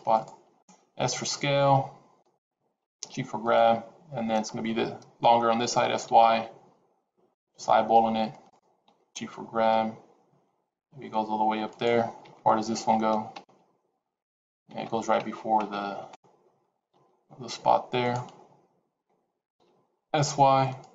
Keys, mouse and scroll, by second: 0.6 s, 2.7 g, 5.6 s, 8.7 g, 16.8 g, 18.2-18.6 scroll down 5, 19.4 s.